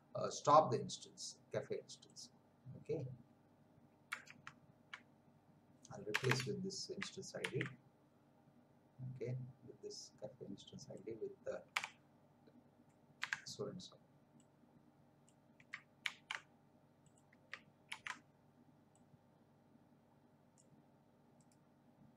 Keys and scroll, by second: 4.4 alt+Tab, 6.1 Return, 7.4 ctrl+v, 11.7 Delete, 13.2 BackSpace, 16.0 ctrl+c, 17.9 ctrl+v.